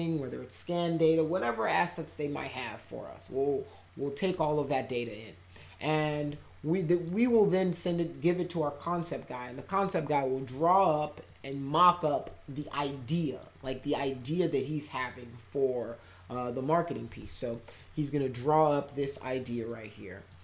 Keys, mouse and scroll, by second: 6.8 middle click, 7.3 middle click, 10.5 middle click, 11.2 middle click, 12.2 middle click, 13.1 middle click, 17.5 middle click, 19.6-20.2 middle drag.